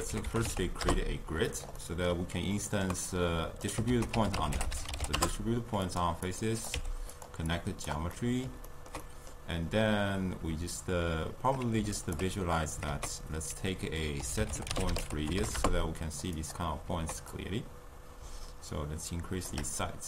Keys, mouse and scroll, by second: 1.8 middle click, 2.6 ctrl+middle click, 3.1 click, 3.9 ctrl+a, 6.3 click, 6.8 f, 7.2 drag, 7.5 click, 8.1-12.0 middle drag, 12.0 alt+shift+click, 12.9 ctrl+a, 17.3-20.0 drag.